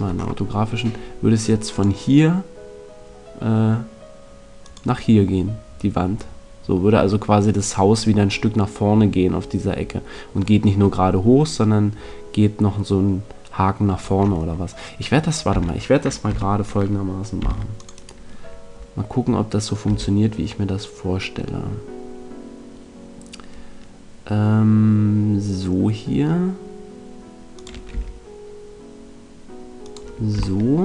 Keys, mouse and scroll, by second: 1.0 middle click, 1.7 click, 4.6 click, 15.5 middle click, 15.5 a, 16.3 z, 17.3 c, 18.0-19.7 right drag, 19.8 e, 27.6 click, 27.9 e, 29.9 click.